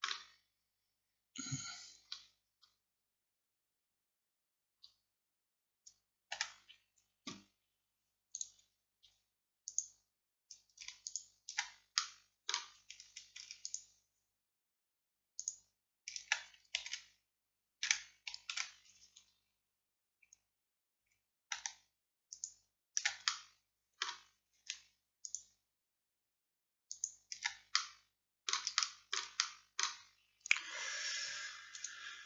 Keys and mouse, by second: 6.4 a, 8.4-9.7 drag, 12.0 click, 12.5 middle click, 13.1 click, 13.7-15.4 middle drag, 16.9 ctrl+x, 18.6 ctrl+z, 19.2 middle click, 22.4-23.6 drag, 23.6-28.0 middle drag, 27.8 click, 28.0 click, 28.2 click, 31.8-32.2 drag.